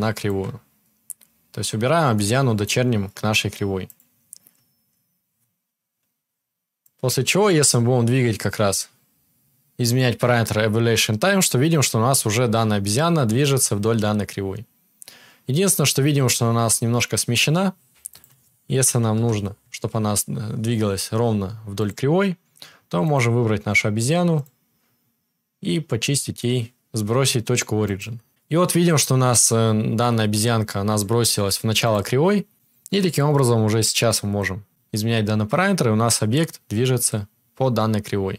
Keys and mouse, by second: 3.9-6.7 drag, 21.8-23.1 drag, 30.8-33.9 drag, 34.2-38.3 drag, 34.2-38.3 middle drag, 34.2-38.3 right drag.